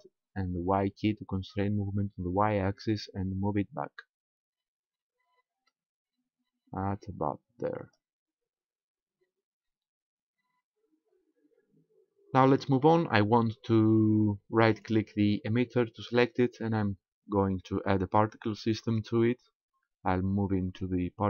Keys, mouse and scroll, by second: 8.0 click, 8.9-9.5 scroll up 1, 9.6 scroll up 1, 10.3-11.1 scroll down 2, 14.7 right click, 18.8 click.